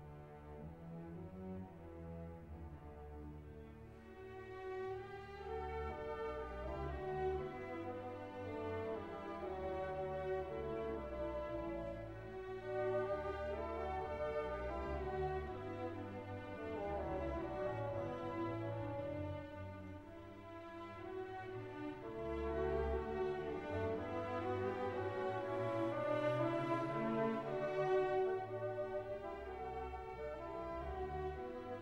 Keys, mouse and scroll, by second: 5.3 click, 6.5-6.9 scroll down 1, 7.1 -, 7.6 click, 7.9 scroll down 1, 9.1 click, 10.2-10.6 scroll down 1, 10.9 click, 15.0-19.5 drag, 19.5-25.9 drag, 27.3 scroll down 1, 27.7-29.1 drag, 29.8 scroll up 1, 30.5 click, 31.2-31.8 scroll down 1.